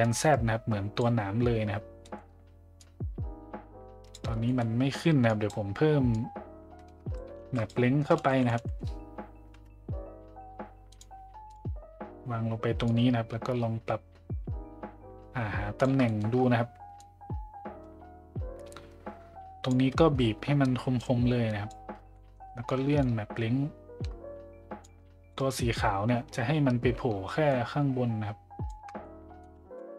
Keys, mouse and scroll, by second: 0.0-1.0 drag, 2.0 middle click, 2.8-4.1 drag, 4.5 middle click, 5.3 click, 6.1-7.3 drag, 7.4 shift+a, 12.8-15.8 drag, 16.1 middle click, 17.0-19.7 drag, 21.0 click, 22.2 middle click, 23.1-24.8 shift+drag, 25.3 middle click, 27.5-28.7 shift+drag, 29.0-29.4 middle drag.